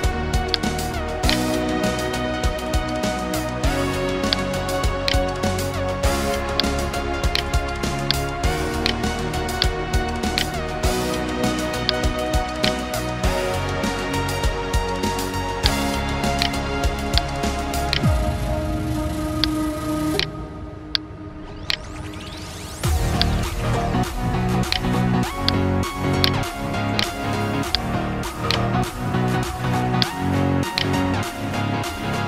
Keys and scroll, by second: 21.8 ctrl+t, 31.6 ctrl+t.